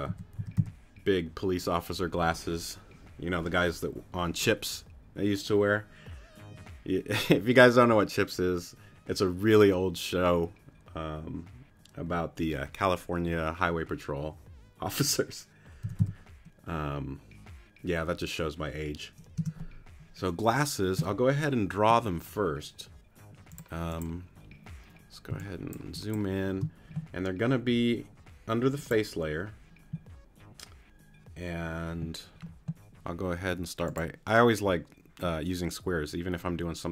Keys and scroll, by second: 0.1 a, 0.4 s, 15.8 e, 16.0 s, 19.4 Return, 25.3 space.